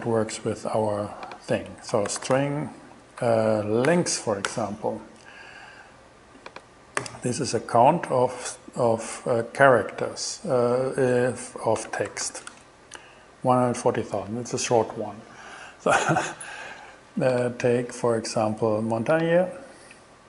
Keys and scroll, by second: 1.7-3.9 typing, 4.2 shift+Return, 7.0 alt+g, 11.6-12.8 typing.